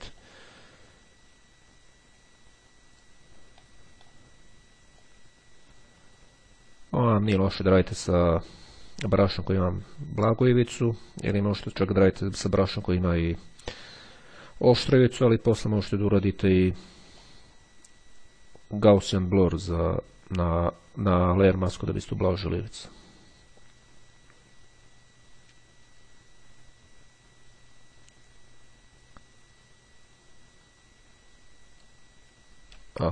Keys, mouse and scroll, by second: 0.3-3.6 drag, 5.1-15.8 drag, 15.6 right click, 17.3-18.8 drag, 19.2-32.4 drag.